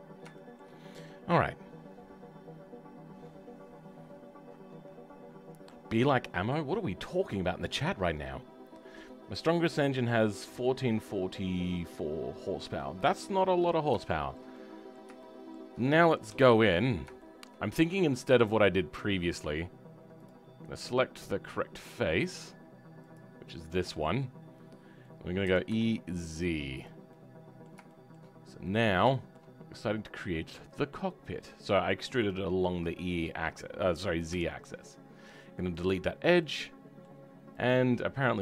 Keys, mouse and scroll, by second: 0.0-0.3 scroll down 2, 0.3-16.2 right drag, 14.0 shift+middle click, 16.2 KP_7, 17.2-18.4 right drag, 17.2 shift+middle click, 18.4-23.6 drag, 23.6-28.3 middle drag, 28.3-28.6 scroll up 2, 28.6-32.3 middle drag, 32.3 click, 35.8 Delete, 36.4-37.6 middle drag, 37.6 click.